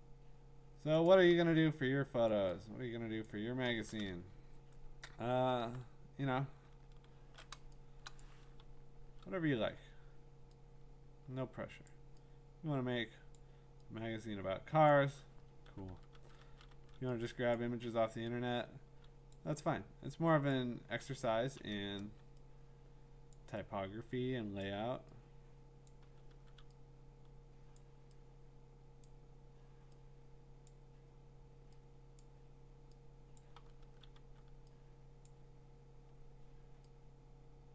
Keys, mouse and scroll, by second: 0.9 click, 1.9 click, 2.3 click, 2.3-3.2 click, 3.2 click, 3.4 click, 3.5 click, 4.3-4.7 scroll, 5.2-5.7 scroll, 6.5-7.4 scroll, 8.2 click, 8.6-9.2 [, 11.8 click, 13.3 click, 14.9 click, 15.4-16.7 typing, 17.5 click, 19.3 click, 20.5 click, 21.4 ], 21.7 ], 22.0 ], 23.3 click, 24.6 click, 25.9 click, 26.0 [, 26.3 [, 27.8 click, 29.1 click, 30.7 click, 33.4 click, 33.6 [, 33.8 [, 34.1 [, 35.3 click.